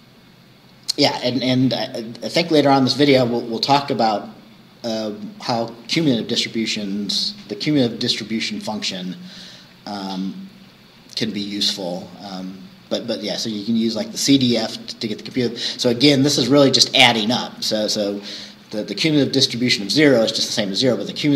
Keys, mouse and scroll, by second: 0.9 scroll down 2, 12.0-12.4 scroll down 2, 18.5 scroll down 2.